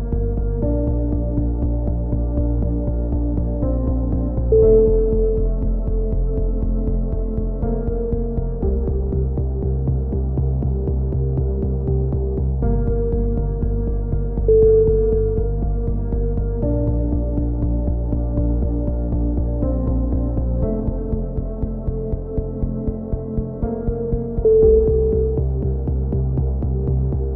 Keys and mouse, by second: 5.6 right click, 6.0 KP_3, 6.5 s, 7.3-8.8 drag, 8.8 right click, 9.8 right click, 10.2-11.4 drag, 10.3 z, 11.2 a, 11.4 Tab, 11.5 click, 14.3 click, 14.4 z, 14.7 z, 14.8 Tab, 15.0-16.3 right drag, 16.3 KP_3, 16.6 z, 17.2-18.8 drag, 18.6 a, 18.8 z, 19.2 click, 20.9 ctrl+KP_1, 21.1 z, 21.4 z, 22.2 ctrl+z, 22.8 click, 23.2-25.3 typing, 25.4 click, 26.7 KP_3, 26.9 z.